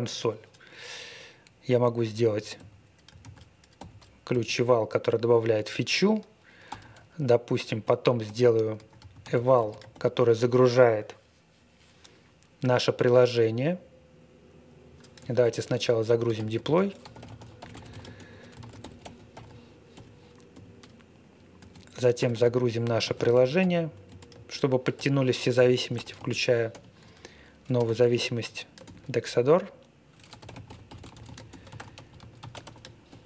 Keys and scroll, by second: 0.6 ctrl+e, 2.5 ', 3.2 super+v, 3.7 ', 4.3 space, 6.4-9.9 typing, 15.4-20.5 typing, 21.5-24.9 typing, 25.9-28.8 typing, 30.0-33.2 typing.